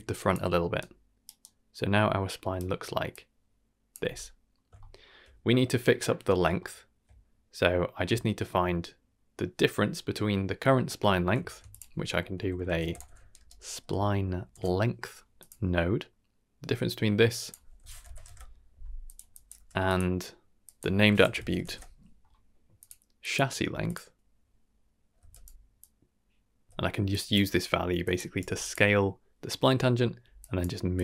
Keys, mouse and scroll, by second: 0.3 d, 1.1 d, 1.2 d, 1.4-2.5 right drag, 1.4 d, 2.5-4.0 typing, 3.1-3.9 drag, 4.7 shift+middle click, 6.6 shift+middle click, 11.4 shift+a, 17.3-19.1 drag, 19.3 drag, 19.5 g, 20.6-22.8 drag, 23.2-25.5 drag, 26.4 click, 26.6 middle click, 26.8 shift+d, 26.8 x, 27.1 drag, 27.5 g, 28.4 g, 30.4 click, 30.4-31.0 typing, 30.9-31.0 drag.